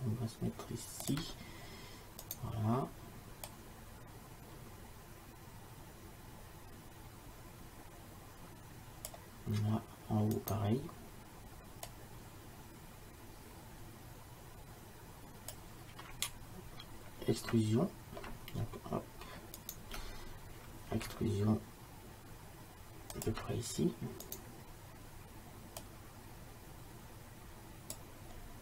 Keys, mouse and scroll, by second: 2.1 e, 2.3 right click, 10.4-11.9 right drag, 12.3-13.9 drag, 19.7-21.8 drag, 21.0 e, 24.4-25.8 drag, 28.5-28.6 middle drag.